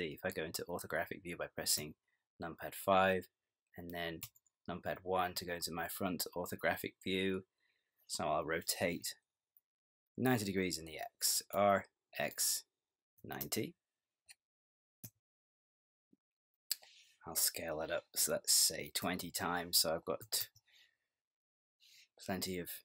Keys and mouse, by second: 1.8 KP_5, 4.2 KP_1, 11.6 r, 19.1 s.